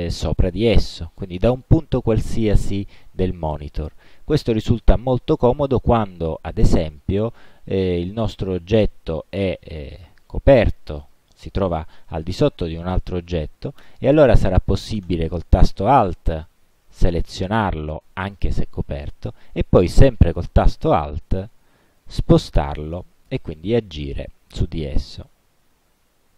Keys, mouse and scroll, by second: 7.4 click, 8.5-10.3 drag, 11.1 click, 13.9 space, 15.2 alt+click, 16.0-16.7 alt+scroll down 4, 16.9-17.5 alt+scroll up 4, 22.1-25.4 alt+drag.